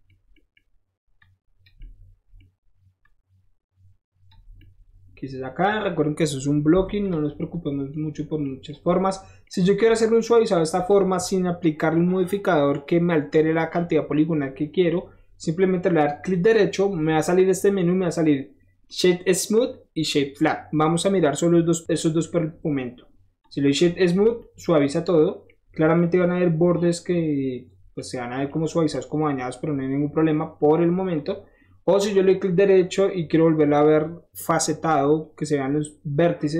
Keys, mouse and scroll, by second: 0.3 middle click, 1.1 click, 1.8 middle click, 3.0-4.2 drag, 4.4 middle click, 7.0 click, 7.2-9.6 middle drag, 10.7 click, 16.2 right click, 23.4 click, 24.0 click, 25.6-27.1 middle drag, 29.1 scroll up 1, 29.4 scroll down 1, 30.2 scroll up 1, 31.2 click, 31.6 scroll down 1, 32.3 right click.